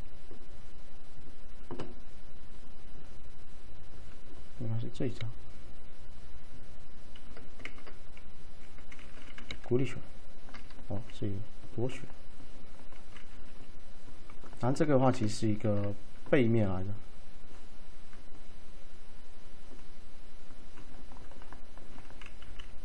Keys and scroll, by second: 1.8 typing, 4.8 typing, 7.7 ctrl+z, 9.5 c, 13.4 d, 15.5 ctrl+shift+a, 22.5 m.